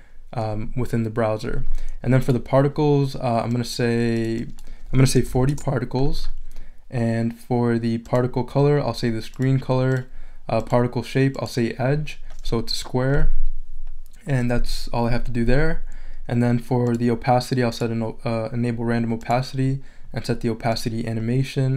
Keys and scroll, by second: 4.9-5.8 typing.